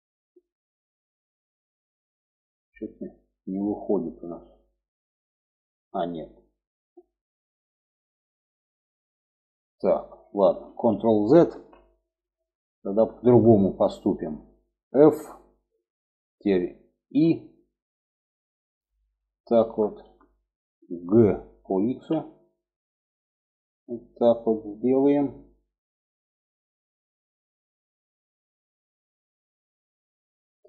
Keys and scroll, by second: 10.0 ctrl+z, 10.8 ctrl+z, 14.4 f, 16.4 i, 17.4 i, 20.4 g.